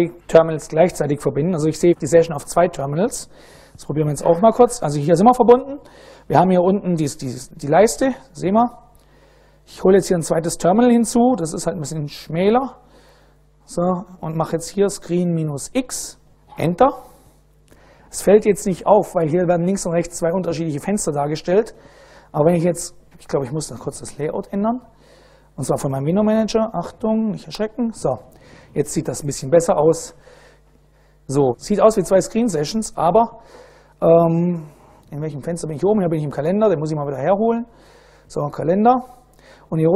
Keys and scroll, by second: 3.3 super+Right, 4.6-5.6 typing, 12.6 Return, 12.9 Return, 14.1-15.6 typing, 16.4 Return, 23.1 BackSpace, 27.3 super+space, 32.7-34.4 typing, 35.9-37.2 typing, 37.4 Return.